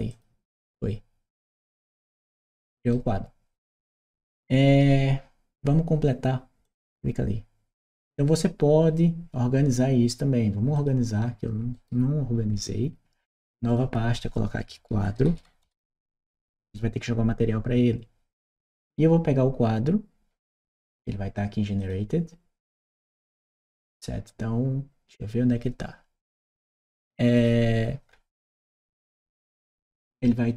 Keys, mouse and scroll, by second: 1.9 right click, 6.5 click, 10.6 click, 11.6 right click, 13.5 click, 14.7-16.4 typing, 19.6 Return, 21.6 click, 22.5 click, 26.3 right click, 27.1 click.